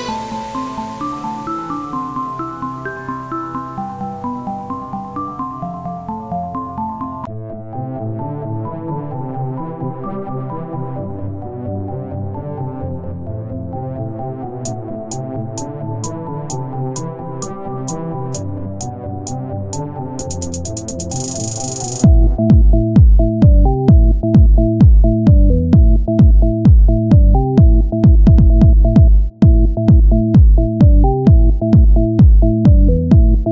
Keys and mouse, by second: 5.7 click, 9.5 w, 11.9 click, 12.8 s, 16.6 s, 17.9 ctrl+z, 18.7 ctrl+z, 18.7 Tab, 19.2 ctrl+a, 19.8 Tab, 21.0 w, 23.9 click, 24.2 s, 28.6 z, 28.8 c, 29.6-31.2 drag, 30.7 s, 33.1 click, 33.1 z.